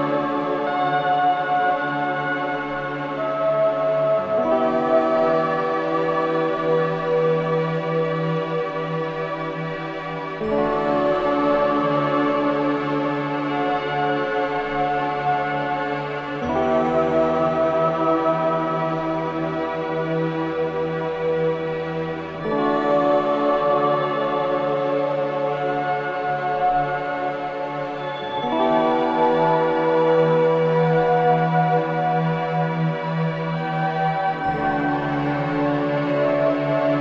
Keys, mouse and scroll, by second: 1.6-2.7 shift+middle drag, 2.7 click, 5.3 click, 6.7 click, 7.9 click, 9.0-10.6 middle drag, 11.9 scroll up 1, 12.7 scroll up 4, 12.7 click, 16.8 e, 18.8 middle click, 19.3-19.8 scroll down 2, 19.8-22.3 middle drag, 22.9 i, 32.5 e.